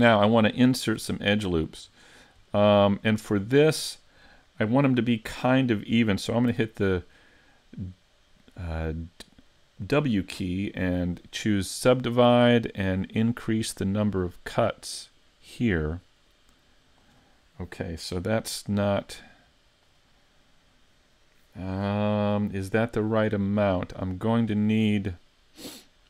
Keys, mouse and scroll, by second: 0.9 Tab, 1.2 middle click, 2.0 shift+middle click, 2.6 middle click, 3.4-3.8 scroll up 2, 3.8 shift+middle click, 6.5 w, 14.6 click, 16.3 click, 19.1 click.